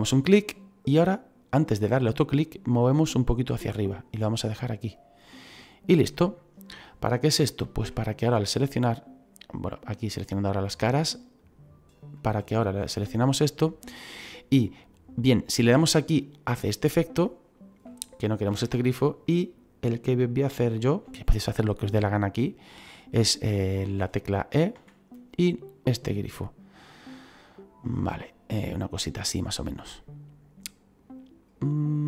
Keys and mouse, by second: 0.4 click, 5.1 click, 6.0 middle click, 7.3 middle click, 8.2 right click, 10.1 click, 11.3 right click, 12.9 middle click, 15.4 click, 24.7 e, 27.0 click, 27.9 middle click, 31.9 click.